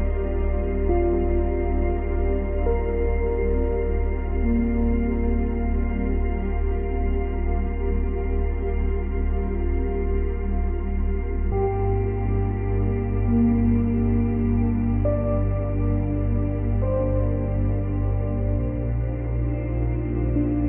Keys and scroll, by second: 1.8 Delete, 5.5 Delete, 8.1 ctrl+c, 8.5 ctrl+v, 16.1 space, 17.3 space, 20.0 space.